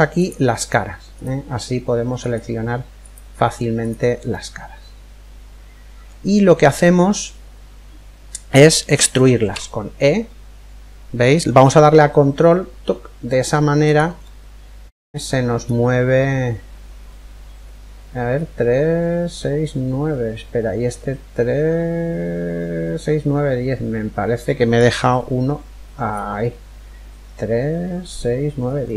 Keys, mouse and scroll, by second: 0.2 click, 0.8-5.2 right drag, 3.9-5.8 middle drag, 9.1 e, 13.8-15.7 middle drag, 24.4 click, 28.5-28.9 middle drag.